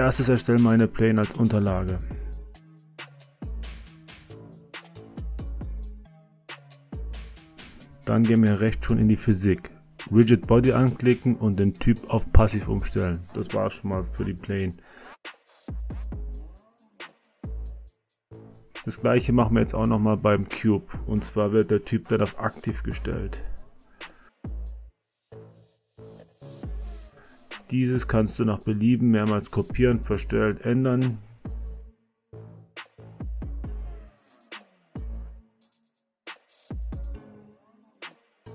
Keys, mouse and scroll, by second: 0.8 a, 1.0 a, 3.5 s, 5.3 click, 6.3-8.5 drag, 9.7 click, 13.2 click, 14.2-14.8 drag, 16.5 click, 19.1 click, 21.8 space, 23.1 space, 24.3 space, 24.8 click, 27.3 shift+d, 28.4-29.7 drag, 30.7 r, 33.8 shift+d, 34.8-35.9 drag, 36.6 r.